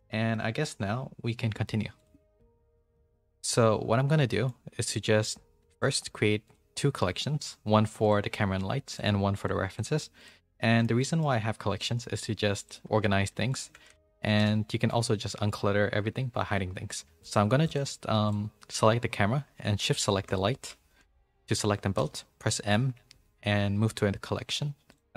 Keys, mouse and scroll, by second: 0.4 middle click, 1.9 click, 2.5 middle click, 3.0 middle click, 4.3 middle click, 5.7 click, 8.0 click, 8.8 click, 9.6 click, 10.1 click, 10.5 shift+middle click, 10.9 middle click, 21.9 m.